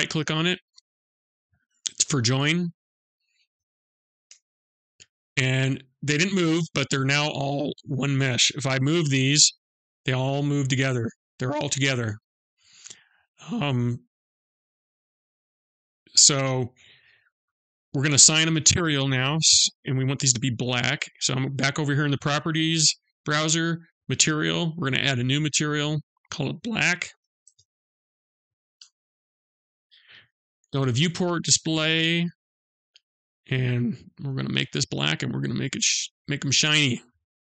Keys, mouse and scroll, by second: 0.2 right click, 3.7 ctrl+j, 5.3 middle click, 8.7 g, 13.9 middle click, 20.0 click, 24.2 click, 25.3 click, 31.4 click, 34.3 click, 37.3 middle click.